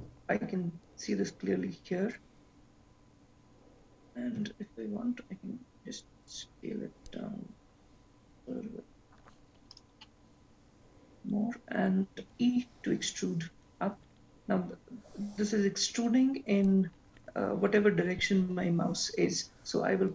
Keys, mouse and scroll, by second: 4.4 s, 12.5 e.